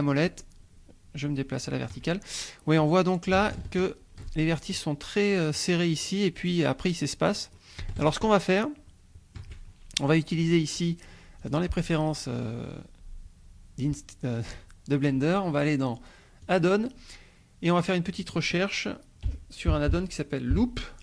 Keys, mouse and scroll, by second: 2.2 shift+middle click, 2.8 scroll up 1, 2.9 middle click, 3.6-4.5 shift+drag, 7.0-7.7 scroll down 2, 8.0 shift+middle click, 8.2-9.6 shift+drag, 10.3 click, 11.4 click, 16.4 click, 17.7-19.2 drag, 19.2 l, 19.7 o, 20.5 p.